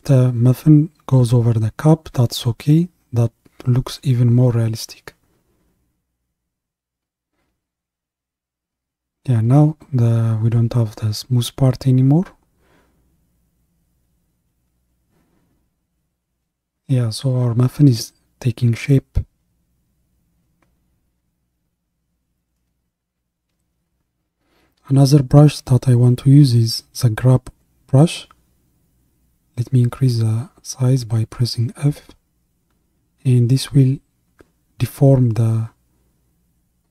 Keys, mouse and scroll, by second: 0.1-3.1 drag, 3.6-7.5 drag, 7.5 ctrl+KP_1, 9.5-12.4 drag, 15.7-29.2 drag, 29.2 f, 34.6-36.9 drag.